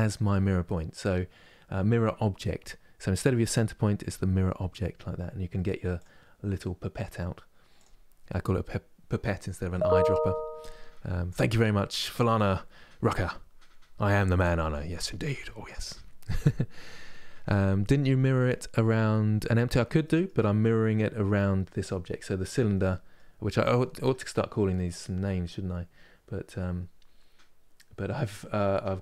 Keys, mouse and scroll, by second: 0.3-3.3 middle drag, 5.7-9.6 drag, 19.7-23.7 middle drag, 23.7 Tab.